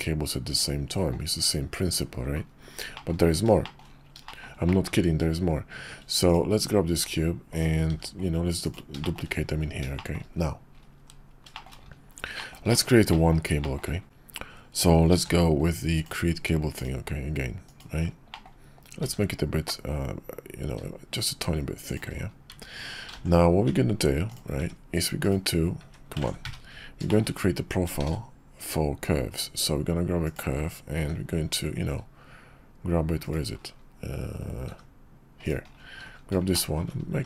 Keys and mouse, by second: 2.9 middle click, 3.6 shift+middle drag, 4.2 shift+middle drag, 4.7 middle drag, 6.3 click, 7.0 shift+d, 7.9 shift+d, 9.0 shift+click, 9.9 shift+click, 10.3 KP_5, 11.5 shift+KP_5, 11.5 shift+click, 12.3 shift+drag, 12.7 click, 13.1 click, 13.6 shift+drag, 15.1 alt+shift+c, 18.3-23.3 drag, 23.3-24.4 middle drag, 25.3 drag, 26.4 `, 27.1 click, 28.0 shift+a, 31.0 g, 34.7 g, 36.5 shift+drag, 37.1 s.